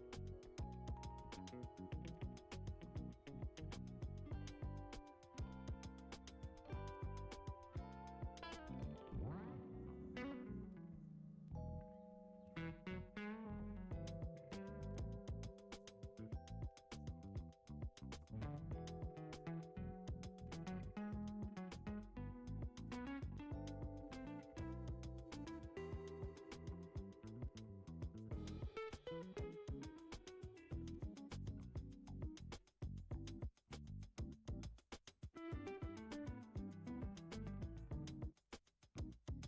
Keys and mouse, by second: 3.3 click, 4.2-5.4 drag, 6.1 click, 6.8 g, 8.3 KP_1, 9.5 s, 11.1 g, 14.5 Tab, 15.6 click, 16.1 alt+z, 16.5-17.4 drag, 17.6 alt+z, 18.1 g, 22.5 ctrl+r, 25.0 Tab, 25.7 g, 28.2 s, 30.7 g, 31.6-32.2 middle drag, 33.2 KP_1, 33.5 Tab, 34.2 alt+z, 36.2 x, 36.8 click, 37.6 click, 38.1 alt+shift+click, 38.4-39.4 right drag.